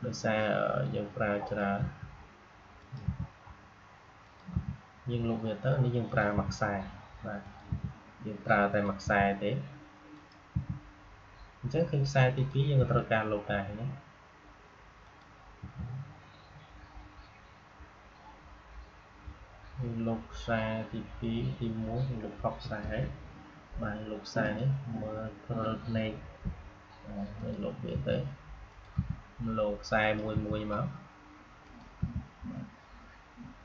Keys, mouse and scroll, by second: 1.4 click, 1.7 Delete, 2.7 click, 2.9 Delete, 4.1 click, 4.4 Delete, 6.0 click, 6.2 Delete, 7.3 click, 7.6 Delete, 8.6 click, 8.9 Delete, 10.0 click, 10.4 Delete, 12.2 click, 12.7 Delete, 14.9 click, 15.5 Delete, 22.5 Delete, 22.5 ctrl+z, 24.3 click, 26.1 Delete, 27.3 click, 27.8 Delete, 28.6 click, 28.8 Delete, 29.9 click, 30.2 Delete, 31.5 click, 31.9 Delete.